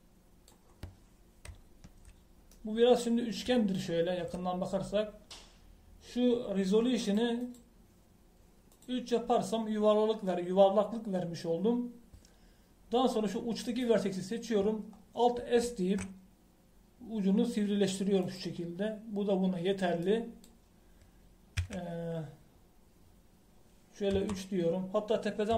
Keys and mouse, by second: 2.5 middle click, 2.6 middle click, 8.0-14.6 drag, 16.6 alt+s, 22.5 KP_1, 25.1 KP_3.